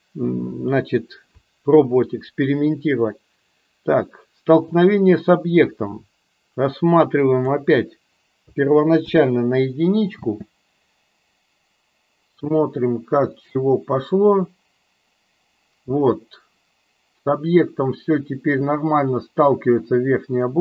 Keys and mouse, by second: 10.1 space.